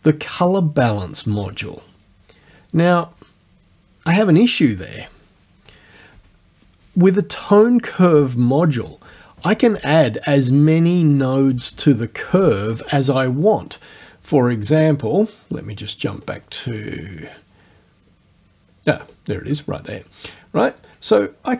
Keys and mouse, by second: 15.0 click, 16.2 click, 19.1 click, 20.9 click.